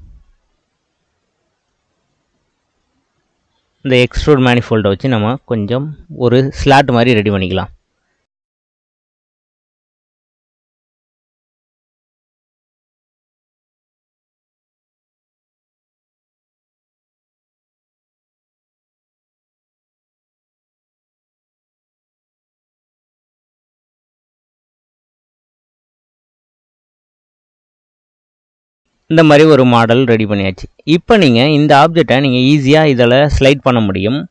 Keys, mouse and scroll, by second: 1.7-4.7 drag, 5.6 click, 7.2 click, 7.7 middle click, 8.3 scroll up 2, 8.5-10.5 middle drag, 10.8 middle click, 11.6 Tab, 11.7 middle click, 11.8 drag, 12.0 middle click, 12.1 shift+a, 12.6 middle click, 13.1 s, 13.7 click, 14.3 s, 15.1 middle click, 15.4 Tab, 16.0 click, 16.3 ctrl+r, 16.9 middle click, 17.3 shift+click, 17.9 middle click, 18.8 click, 18.9 middle click, 19.2 click, 19.3 middle click, 19.7 click, 20.3 e, 21.2 s, 23.2 middle click, 23.5 click, 24.2 middle click, 24.6 click, 24.9 click, 25.3 middle click, 25.7 click, 26.2 Tab, 26.3 middle click, 26.7 Tab, 26.9 ctrl+z, 27.0 ctrl+z, 27.2 ctrl+z, 27.3 ctrl+z, 27.9 e, 28.4 Tab, 28.5-29.2 middle drag, 29.2 click, 29.6-30.2 middle drag, 30.2 scroll up 1, 30.7 click, 31.1-32.2 middle drag, 32.2 click.